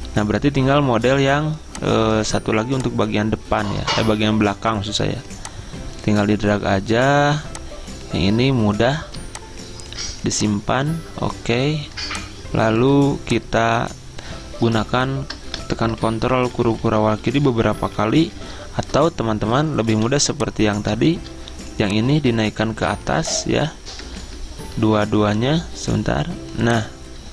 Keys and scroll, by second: 3.9 alt+Tab, 15.8 Return, 16.2 ctrl+[, 16.5 ctrl+[, 16.6 ctrl+[, 16.8 ctrl+[, 20.2 v, 24.4 Return.